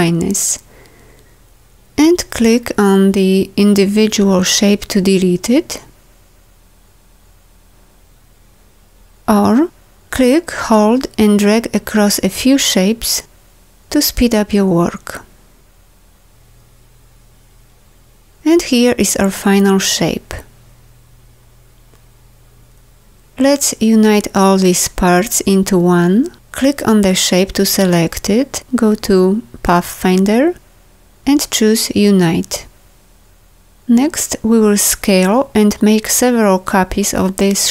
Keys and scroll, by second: 20.6 v.